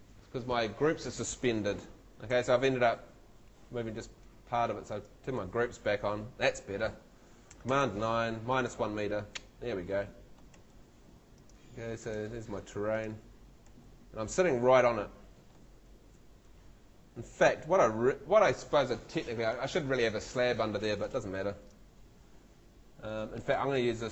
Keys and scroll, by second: 2.3 super+z, 7.7 super+9, 10.5 Escape, 12.2 Escape, 13.7 Escape.